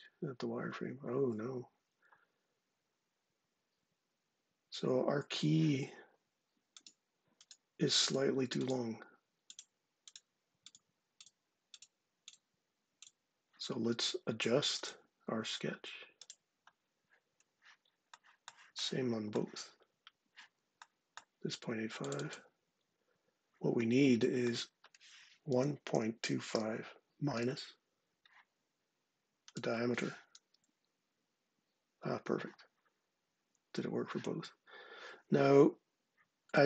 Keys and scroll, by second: 0.0 ctrl+9, 0.5 ctrl+8, 25.1-27.2 typing, 30.3 Return.